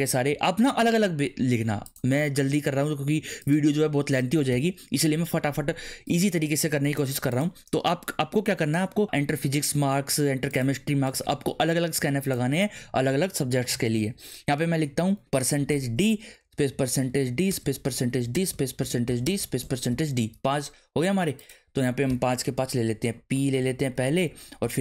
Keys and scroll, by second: 4.5 ;, 15.4-19.9 typing, 22.3-24.8 typing.